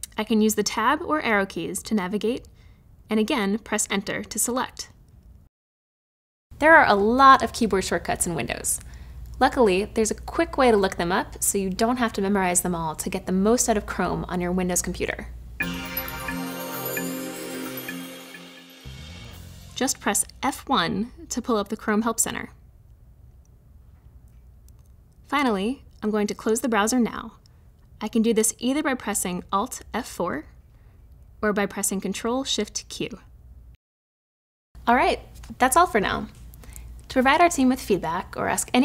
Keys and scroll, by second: 0.8 Tab, 20.2 F1, 28.9 alt+F4.